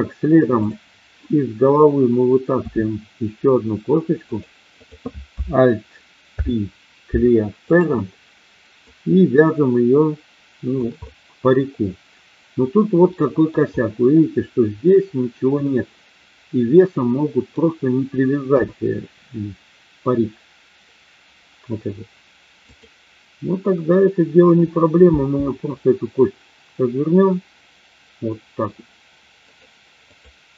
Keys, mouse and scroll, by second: 0.6 click, 2.5 e, 4.3 click, 6.3 alt+p, 8.8-10.8 drag, 10.9-13.6 middle drag, 15.6-17.5 middle drag, 18.5 KP_1, 22.6 click, 25.0 g, 29.4 click, 30.1 click.